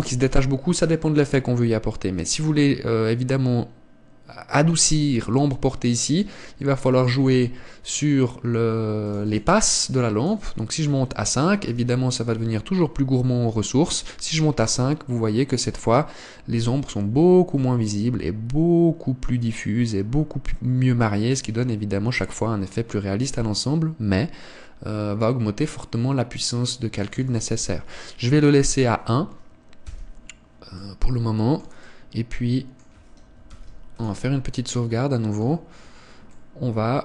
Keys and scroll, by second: 8.4 Escape, 30.8 Escape, 34.5 ctrl+s.